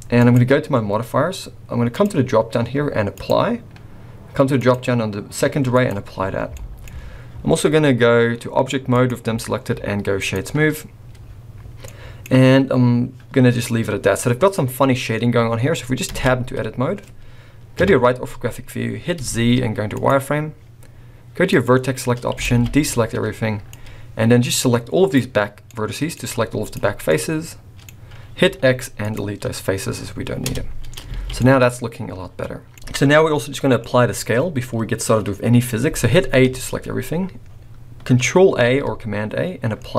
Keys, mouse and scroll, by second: 0.1 click, 1.9 click, 4.6 click, 6.3-6.8 scroll down 3, 6.5 middle click, 6.8-7.2 scroll up 3, 7.5-8.2 scroll down 2, 8.9 click, 11.2-11.8 scroll up 3, 11.8 middle click, 13.4-13.8 scroll up 1, 13.9 scroll down 2, 14.2 middle click, 16.1 Tab, 17.8 KP_3, 19.2 z, 21.5 click, 21.9-22.2 scroll down 2, 22.4 alt+a, 23.1-23.6 scroll up 1, 23.6 click, 25.6 middle click, 26.7 z, 27.0 middle click, 28.4 x, 30.5 Tab, 31.2 alt+a, 31.4 middle click, 32.7-33.8 scroll down 1, 33.8 middle click, 36.1 scroll down 3, 36.4 a, 37.4-38.2 scroll up 3, 38.6 ctrl+a.